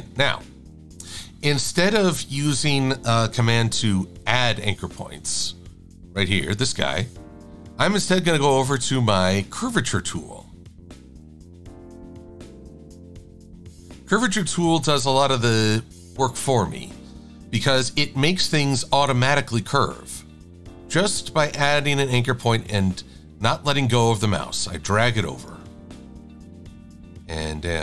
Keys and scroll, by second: 3.6 =.